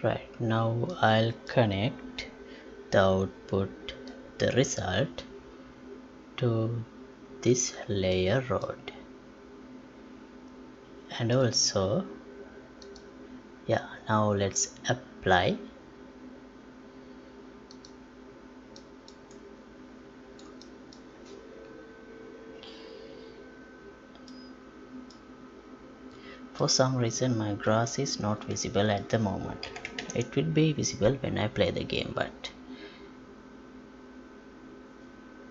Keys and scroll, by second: 29.7 F11, 30.0 alt+p.